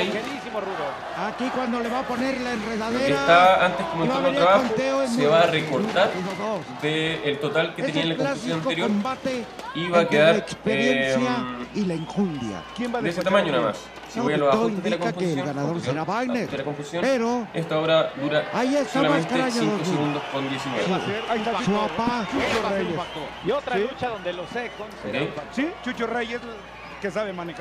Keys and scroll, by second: 0.3 alt+super+-, 18.7 alt+super++.